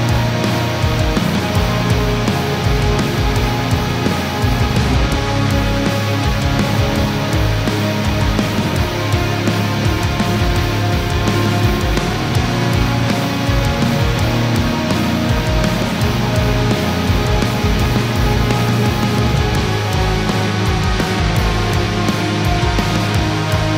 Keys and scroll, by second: 2.2 ctrl+-, 3.7 ctrl+0.